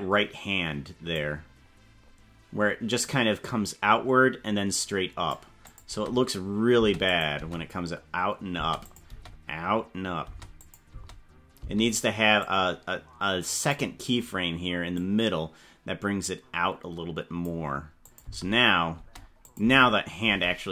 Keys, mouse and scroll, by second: 1.5-2.4 scroll up 8, 3.0-5.4 drag, 5.8 space, 6.8 space, 7.0 click, 7.3 space, 8.7 space, 8.8 click, 9.0 space, 10.3 space, 10.6 click, 10.8 space, 11.7 space, 12.4-13.7 drag, 15.1-17.5 drag, 18.1 click, 18.2-20.7 typing, 19.4 click.